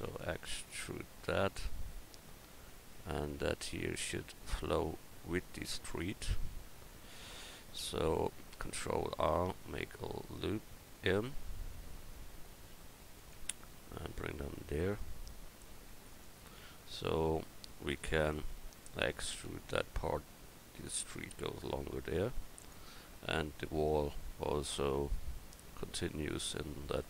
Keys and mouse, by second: 0.0 e, 2.1 Tab, 6.5 Tab, 8.6 ctrl+r, 12.7 ctrl+r, 18.3-19.5 right drag, 19.5 e, 24.1 Tab, 24.9 Tab.